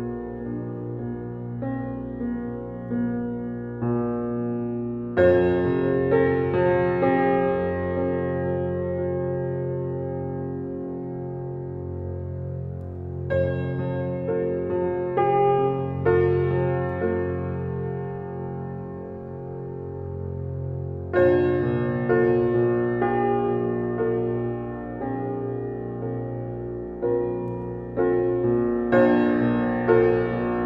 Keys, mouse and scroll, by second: 0.2-0.6 middle drag, 0.6 click, 0.9 shift+click, 1.4 alt+middle click, 1.7-2.0 scroll up 3, 2.0 shift+middle drag, 2.3-3.1 scroll down 4, 3.1 g, 4.6-5.5 middle drag, 5.5 shift+a, 6.5 click, 7.1 shift+d, 8.4 alt+middle click, 9.1 shift+middle drag, 9.3-9.8 scroll down 1, 9.8 r, 11.9 s, 12.2 s, 13.6 g, 14.7-15.7 scroll up 8, 15.1 shift+middle drag, 15.7-16.1 shift+middle drag, 16.1-16.5 scroll down 1, 16.5-17.2 middle drag, 17.8 g, 19.2-19.8 scroll down 3, 19.8 scroll down 1, 19.9 g, 22.8-23.5 shift+middle drag, 23.5 g, 26.8 click, 27.2 drag, 27.9 z, 28.5 drag, 29.7 alt+z, 30.4 click.